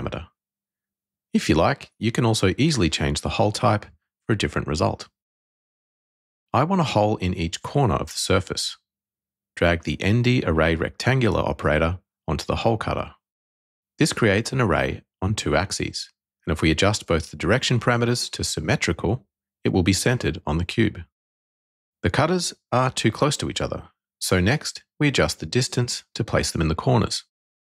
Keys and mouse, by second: 2.0-3.1 drag, 4.5-5.7 drag, 6.3-7.3 drag, 10.0 click, 13.5 middle click, 16.5-17.6 drag, 18.3 click, 21.8-23.4 drag, 24.6-25.9 drag, 27.0 click, 27.4-27.7 middle drag.